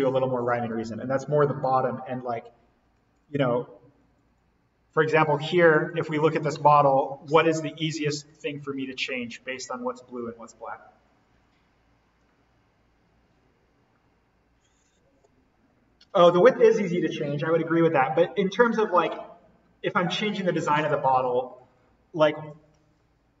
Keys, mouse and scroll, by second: 1.1-1.6 scroll up 1, 2.9 Escape, 3.6 scroll down 1, 5.2 scroll up 1, 6.2-7.2 scroll down 1, 7.2-8.4 scroll up 1, 8.4-10.2 scroll down 1.